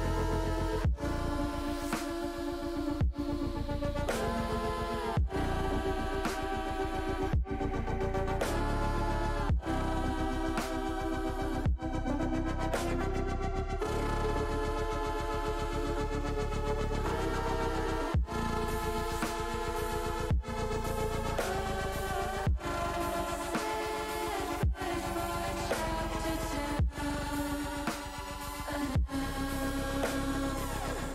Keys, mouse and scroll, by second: 1.3 s, 2.6 click, 3.6-4.9 drag, 5.5 middle click, 6.3-7.6 middle drag, 8.6 middle click, 10.5 click, 11.4 alt+shift+click, 12.4 click, 13.0 alt+shift+click, 13.8 click, 14.6 ctrl+shift+click, 17.2 ctrl+shift+z, 17.9 click, 18.5 middle click, 20.0 ctrl+click, 20.6 middle click, 21.8 ctrl+click, 23.1 middle click, 24.1 shift+click, 25.4 ctrl+shift+click, 26.8 ctrl+click, 27.3 ctrl+click, 27.8 ctrl+click, 28.2 ctrl+click, 29.2 ctrl+z, 29.4 ctrl+z, 29.7 ctrl+z, 29.9 ctrl+z, 30.2 ctrl+z, 30.5 ctrl+z, 30.9 ctrl+z.